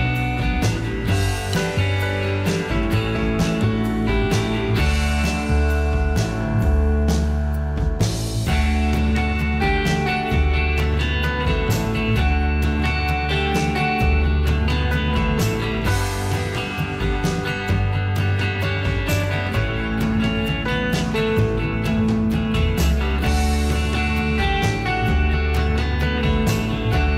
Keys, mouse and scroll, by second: 13.6 f.